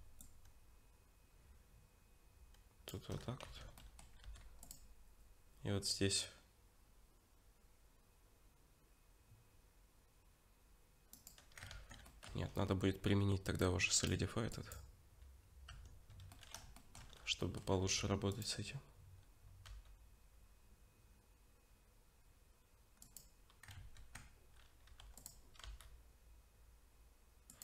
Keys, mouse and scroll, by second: 0.2 shift+click, 3.5 Tab, 3.8 middle click, 4.2 ctrl+r, 11.7 ctrl+z, 12.1 middle click, 12.3 Tab, 14.0 click, 15.7 Tab, 16.3 middle click, 16.8 shift+middle click, 17.1 scroll up 2, 17.4 middle click, 17.8 ctrl+r, 23.8 ctrl+z, 24.9 ctrl+r.